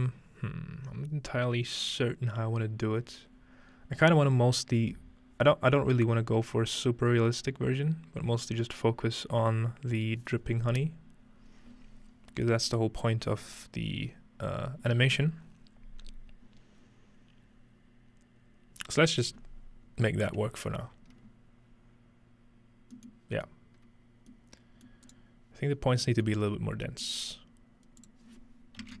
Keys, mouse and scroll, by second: 4.9-5.8 scroll down 2, 5.8-6.6 scroll down 1, 6.6-11.0 scroll down 3, 11.6-18.2 scroll up 3, 23.0-25.8 middle drag, 25.1 right click, 25.8 scroll down 1, 26.4 scroll up 1, 26.8 scroll down 1, 27.1 scroll up 1, 28.0 click.